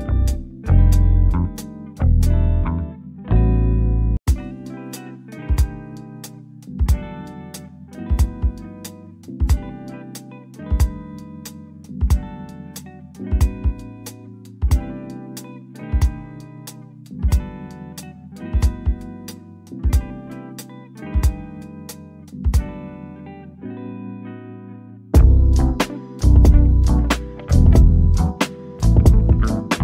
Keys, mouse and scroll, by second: 0.4 click, 3.5 shift+click, 13.0 click, 16.8 1, 17.4 Return, 21.5 shift+click, 22.5 click, 24.2 shift+click, 29.4 click.